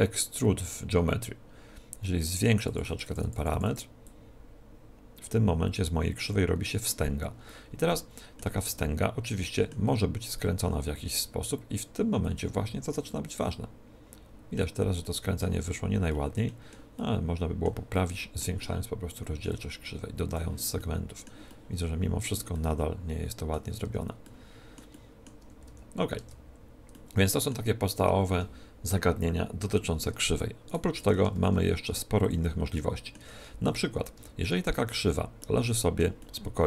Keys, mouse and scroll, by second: 2.1-5.8 drag, 7.4-10.6 middle drag, 8.4 Tab, 10.6 ctrl+t, 12.3-14.1 drag, 13.9 middle click, 14.9-19.7 middle drag, 19.5-21.3 drag, 20.7 middle click, 21.3-24.1 middle drag, 23.8 Tab, 25.3 a, 25.6 z, 26.1 Tab, 26.5-28.7 middle drag, 29.9 Tab, 30.6-32.5 right drag, 30.9 x, 31.3 shift+a, 32.7-36.6 middle drag, 33.3 Tab, 34.1 a, 34.6 Tab.